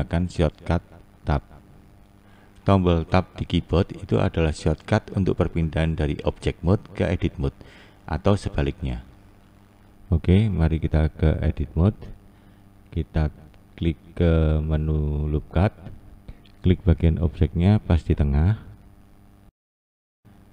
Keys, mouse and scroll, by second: 7.6 Tab, 8.2 Tab, 8.9 Tab, 9.4 Tab, 9.9 Tab, 10.6 Tab, 11.3 Tab, 12.0 Tab, 12.5 Tab, 13.3 Tab, 15.4 Tab, 18.4-20.5 drag.